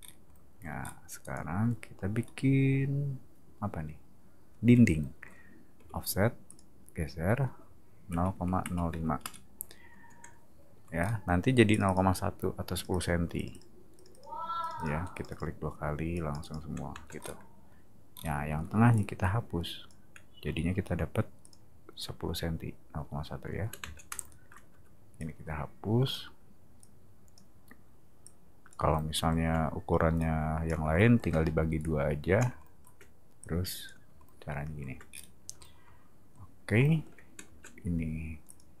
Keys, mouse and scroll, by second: 0.0 middle click, 0.8 middle click, 1.2 click, 2.2-3.5 middle drag, 5.7 f, 6.4 click, 11.0 middle click, 11.7 click, 11.8 click, 12.8 click, 12.9 click, 13.3 click, 13.5 click, 13.9 click, 14.1 click, 14.6 click, 15.1 click, 16.1 click, 16.9 space, 17.2 middle click, 18.1 middle click, 18.5 e, 18.9 click, 20.4 r, 20.8 t, 21.4 click, 23.8 space, 25.2 click, 26.8 click, 28.2 click, 30.2 click, 31.8 click, 33.4 click, 35.1 scroll down 1, 37.4 space, 38.5 click.